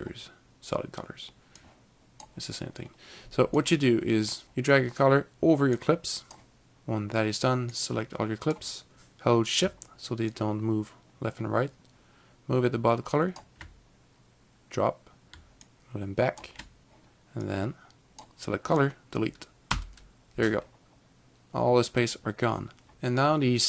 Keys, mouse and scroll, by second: 1.5 scroll, 1.7 click, 3.7 click, 4.4 click, 5.9 click, 7.9 click, 10.3 click, 10.4 shift+click, 15.8 shift+click, 17.5 click, 20.9 Delete.